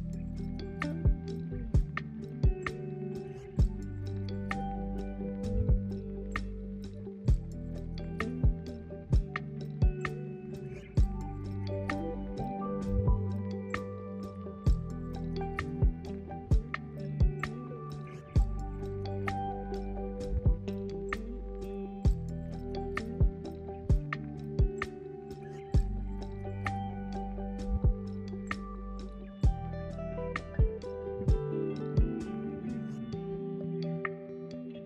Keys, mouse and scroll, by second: 0.1-3.0 middle drag, 3.0 click, 3.3 scroll down 1, 5.6 click, 8.3 middle click, 9.9 click, 14.1 click, 14.2-16.1 drag, 17.4 F2, 24.3 click, 26.3 F2, 27.8 t, 29.7 click, 30.6 F2, 33.7 click, 34.7 F2.